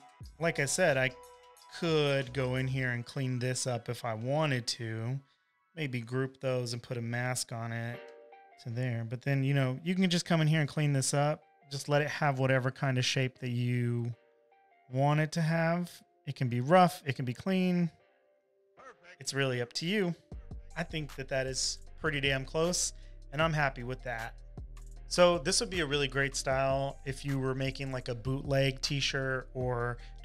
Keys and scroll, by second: 6.8 super+g, 20.7 v, 20.9 space, 21.7 super+=.